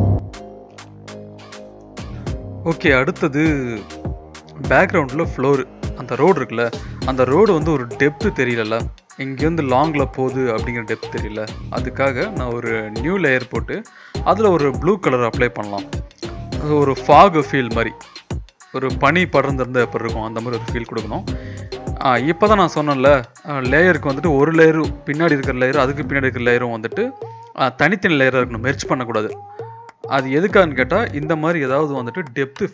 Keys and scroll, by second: 0.6 Return, 0.9 Return, 5.3 [, 5.5 [, 5.7 [, 5.9 [, 12.6-13.8 typing, 17.5 ctrl+[, 18.0 ctrl+[, 18.6 ctrl+[, 19.3 ctrl+], 21.1 ctrl+[, 21.7 ctrl+[, 22.3 ctrl+[, 22.8 ctrl+[, 23.5 ctrl+[, 24.6 ctrl+[, 26.8-29.9 typing.